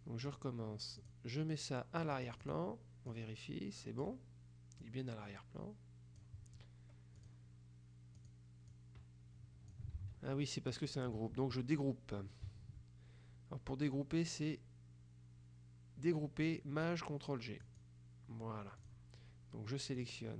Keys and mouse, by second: 1.1 click, 2.1-3.1 drag, 4.9-6.8 drag, 7.3 click, 8.3 click, 10.1 ctrl+z, 17.7 click, 18.9 click, 20.1 click.